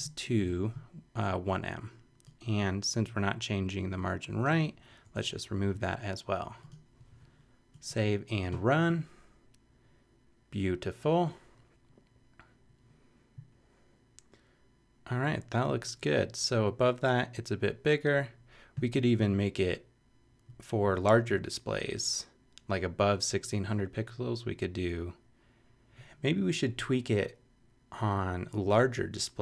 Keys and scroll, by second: 0.7 BackSpace, 4.9 BackSpace, 5.6 super+BackSpace.